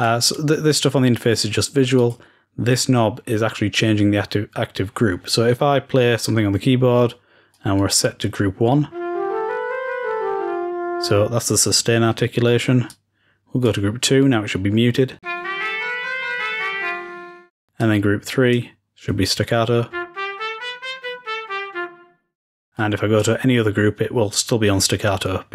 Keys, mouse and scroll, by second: 1.9 click, 7.4-8.4 drag, 12.8-14.5 drag, 17.7-20.9 drag, 22.7 click.